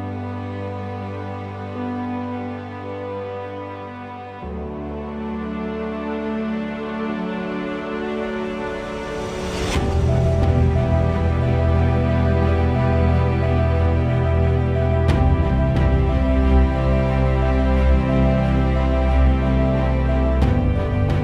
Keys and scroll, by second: 0.8 1, 1.1 6, 1.5 Return, 14.0 1, 14.5 0, 14.8 Return.